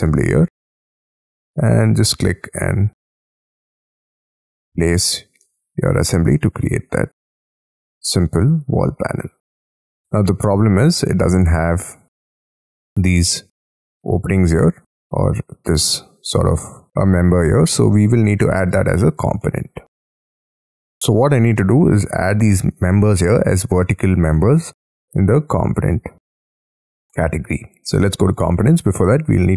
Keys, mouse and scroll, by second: 4.7 middle click, 5.6-6.0 scroll up 11, 5.6 space, 6.3 middle click, 9.1-9.9 scroll down 12, 9.9 middle click, 10.5-11.6 scroll up 10, 11.6 scroll up 6, 14.6 middle click, 15.1-16.9 scroll up 8, 16.9-17.5 scroll down 5, 17.5-18.3 scroll down 11, 18.3 middle click, 19.4 middle click, 20.5-21.0 scroll up 11, 21.0 middle click, 22.4-23.0 scroll up 4, 24.3 middle click, 24.5-28.6 scroll down 3, 28.6 middle click, 29.1-29.5 scroll up 17.